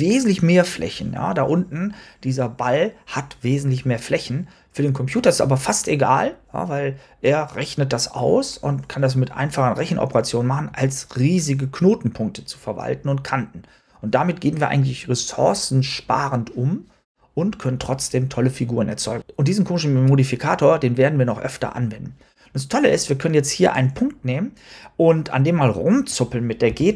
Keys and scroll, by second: 26.6 g.